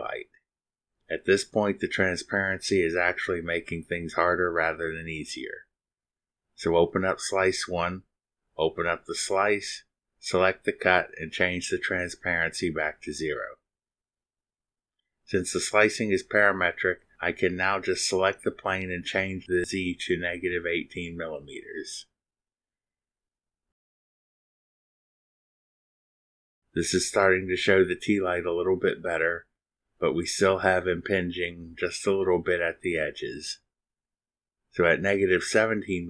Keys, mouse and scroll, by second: 1.4 click, 2.0 scroll down 2, 3.2 click, 4.4 click, 5.7 click, 6.8 click, 8.6 0, 14.1 click, 15.9 click, 18.1 click, 22.2 click, 23.5 click, 24.1 click, 25.3 click, 26.0 click, 31.1 click, 31.8 click, 33.9 click, 35.7 click.